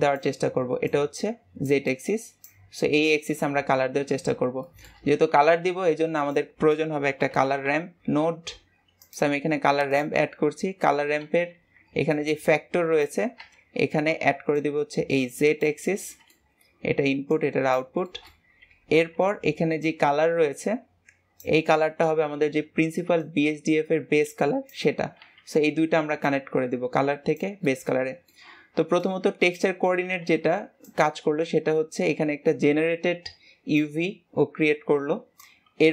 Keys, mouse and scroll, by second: 14.9 click, 17.6-35.9 drag.